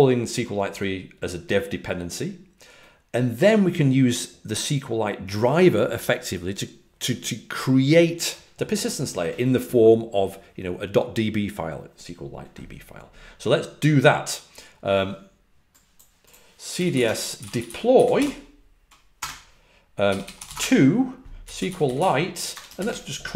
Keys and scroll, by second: 16.4-22.9 typing.